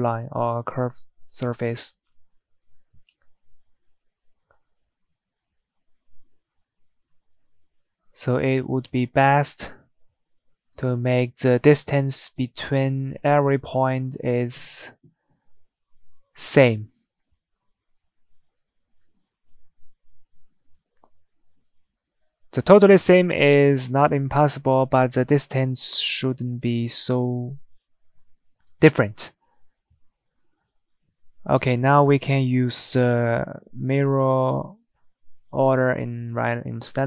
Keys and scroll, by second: 2.9 Tab, 14.5 Tab, 15.6 Tab, 33.4 Escape, 34.3 Escape.